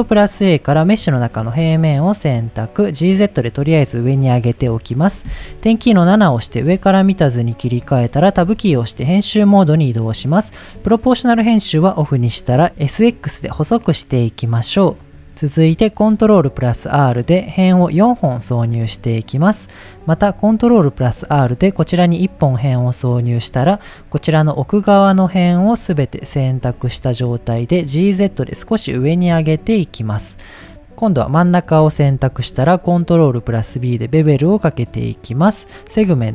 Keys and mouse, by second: 1.4 g, 1.5 z, 2.5 click, 4.6 KP_7, 6.3 shift+middle drag, 8.3 Tab, 10.6 click, 12.6 s, 13.1 x, 15.1 click, 16.1 ctrl+r, 17.7 right click, 21.1 ctrl+r, 21.9 right click, 23.5 click, 24.7 middle click, 25.9 shift+middle click, 26.7 g, 26.8 z, 28.0 click, 28.3 middle click, 29.0 g, 29.2 z, 30.1 click, 32.1 ctrl+b, 35.3 click.